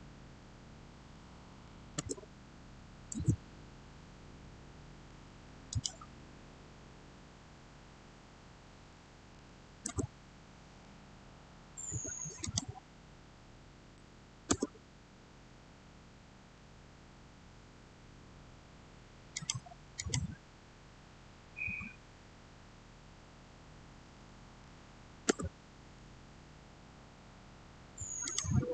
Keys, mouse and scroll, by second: 1.4 6, 1.8 Return, 5.5 Return, 5.6 click, 8.8-9.2 typing, 9.7 Return, 12.3 click, 14.3 Return, 19.2 click, 24.1-24.5 typing, 25.1 Return, 28.1 click.